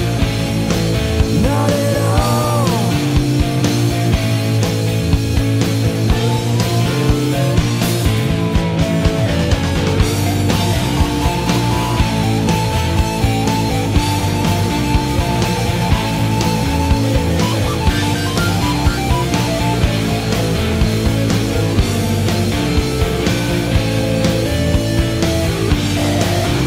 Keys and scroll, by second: 6.5 Delete, 14.1 scroll, 20.9 scroll, 22.4 scroll.